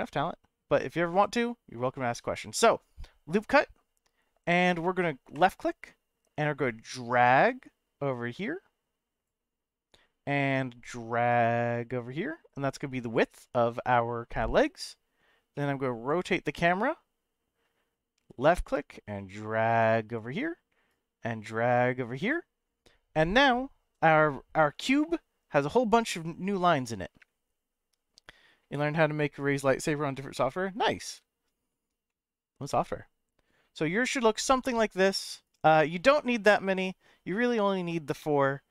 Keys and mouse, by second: 1.1 click, 5.3-9.2 drag, 10.5-12.5 drag, 15.5-17.6 middle drag, 18.4-20.1 drag, 20.9-22.3 drag, 23.4-29.2 middle drag, 30.4 shift+middle click, 32.1 middle click.